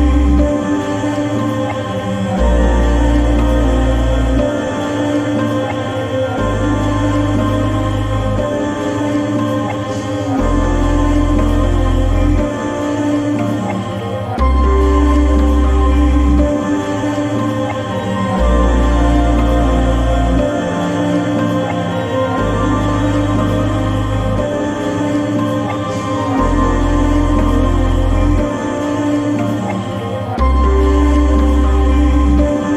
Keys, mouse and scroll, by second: 0.8-12.0 drag, 2.8-3.5 typing, 13.1-20.1 drag, 21.0-31.1 drag.